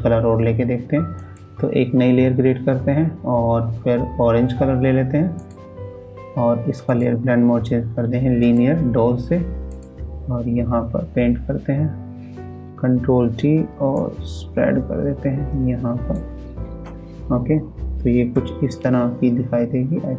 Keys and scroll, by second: 12.6 ctrl+t.